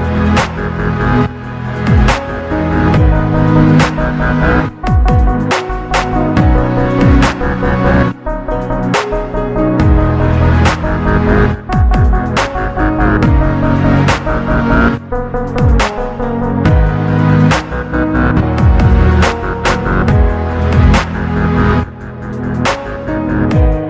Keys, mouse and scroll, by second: 0.4 click, 0.9 g, 2.6 click, 3.4 click, 3.7 g, 5.9 click, 6.6 click, 7.1 g, 9.7 click, 11.0 KP_1, 11.7-12.1 scroll up 2, 12.1 shift+middle click, 13.0-13.4 shift+scroll down 2, 13.8-14.7 scroll down 1, 14.7-15.1 scroll down 1, 16.2 click, 17.0-17.9 scroll up 2, 18.4 a, 19.8-22.9 drag.